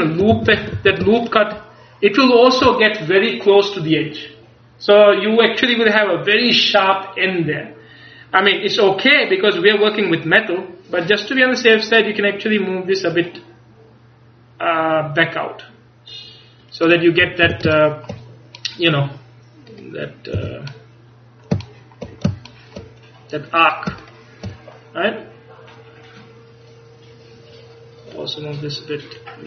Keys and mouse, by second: 0.4 a, 0.8 a, 17.6 a, 20.4 a.